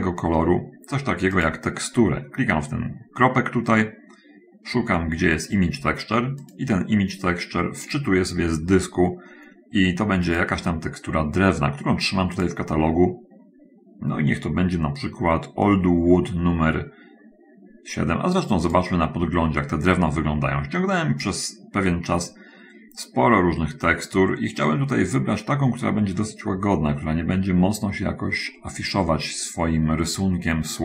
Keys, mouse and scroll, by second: 0.2 click, 1.8 click, 6.4 click, 10.7 click, 12.4 click, 19.1 click, 23.6-24.1 scroll down 1, 24.2-24.6 scroll down 1, 25.8 scroll down 1, 27.4 middle click, 28.8 middle click, 29.9 middle click.